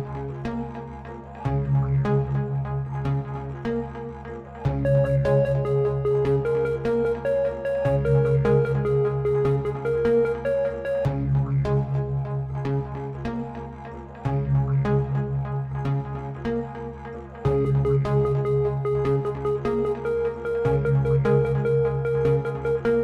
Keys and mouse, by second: 0.5-1.9 drag, 2.3-4.0 right drag, 4.5-6.0 right drag, 7.0 space, 10.3 space, 12.0-16.7 drag, 18.0 click.